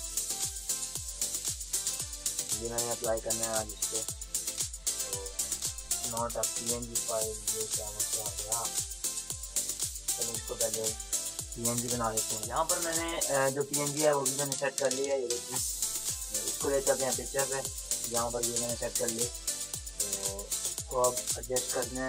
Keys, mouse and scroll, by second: 2.0 click, 2.0-5.4 drag, 15.4 Delete, 16.1-18.2 drag, 18.2 ctrl+-, 19.4 click, 19.4-21.0 drag, 21.2 ctrl+space, 21.3 click.